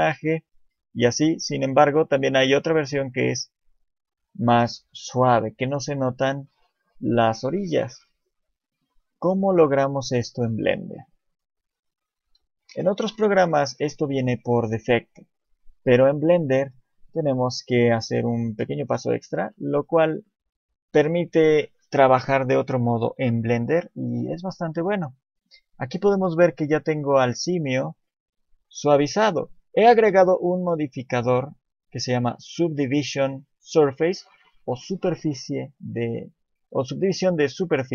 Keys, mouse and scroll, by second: 0.2 shift+middle click, 2.5 click, 5.0 click, 6.0 click, 8.1 shift+middle click, 8.5 scroll up 3, 8.9 click, 9.2 click, 9.7 shift+click, 10.2 click, 10.7 shift+click, 11.0 shift+click, 11.4 shift+click, 12.2 KP_7, 13.1-13.7 scroll down 6, 13.6 shift+middle click, 16.8 2, 17.5 KP_1, 18.1-18.6 scroll up 5, 18.4 shift+middle click, 18.9 scroll down 1, 19.1 scroll up 1, 19.6 shift+middle click, 20.0 scroll up 1, 20.3 shift+middle click, 24.8 click, 25.4-26.0 scroll up 10, 26.5-28.1 scroll up 3, 28.7 click, 29.4 scroll down 7, 32.1 scroll down 3.